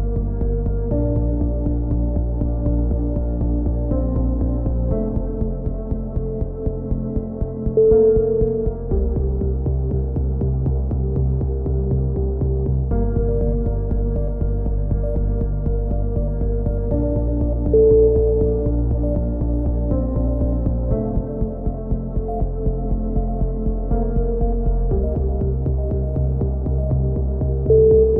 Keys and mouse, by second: 2.3 right click, 3.4-4.4 drag, 5.2 a, 5.4 z, 6.1-7.4 middle drag, 7.2 z, 7.4 click, 8.3-9.5 middle drag, 10.3 ctrl+r, 11.2 a, 12.4 ctrl+r, 12.8 a, 13.7 click, 14.1 middle click, 14.1 k, 14.8-16.7 middle drag, 19.0 ctrl+z, 19.7-20.7 drag, 20.7 middle click, 20.9-22.5 drag, 23.4-26.8 right drag, 23.9 click, 26.3 click, 26.8-27.9 drag.